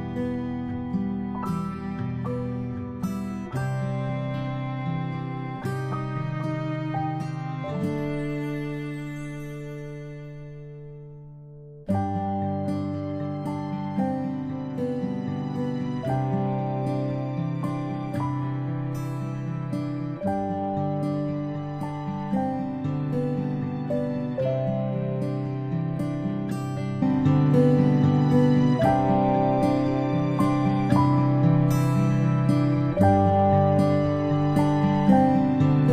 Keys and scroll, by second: 14.7 ctrl+a, 16.6 ctrl+z.